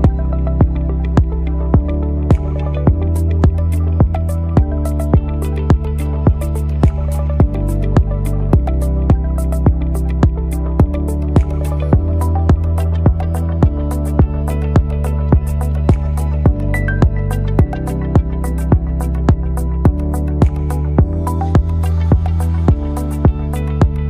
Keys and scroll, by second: 7.5 ctrl++, 9.9 ctrl++, 11.2 ctrl++, 13.5 ctrl+alt+-, 13.7 ctrl+alt+-, 22.7 ctrl+n.